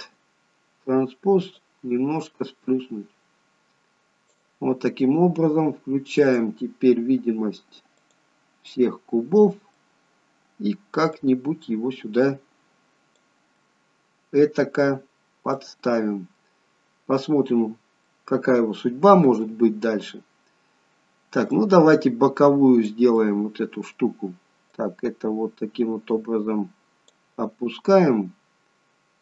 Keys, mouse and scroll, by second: 1.6 click, 6.2 click, 8.0 click, 8.8 middle click, 11.8 click, 13.5 middle click, 15.6 middle click, 19.5 middle click, 21.6 click, 23.2 middle click, 26.3 click.